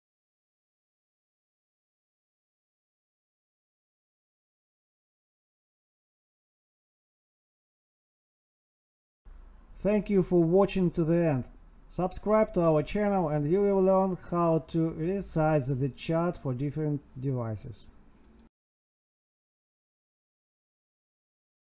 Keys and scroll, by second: 0.8 Tab, 1.2 space, 1.4 space, 3.1 Tab, 4.7 Tab, 5.5 Down, 6.7 ctrl+s.